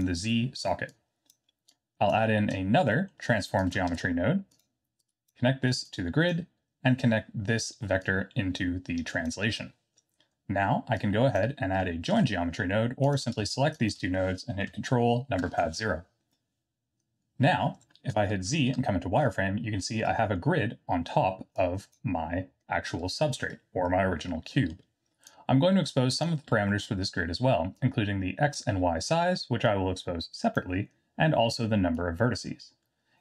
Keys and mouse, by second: 0.9-1.3 drag, 1.7 click, 2.9 middle click, 3.9 shift+d, 5.0-5.3 drag, 6.0 click, 8.0-9.3 drag, 11.1 click, 13.0 click, 13.8 shift+click, 19.2 z, 20.0-20.3 middle drag, 21.7 click, 24.5 middle click, 25.2-26.3 drag, 26.6 middle click, 27.9-28.5 drag, 29.8-30.5 drag, 31.9-33.2 drag.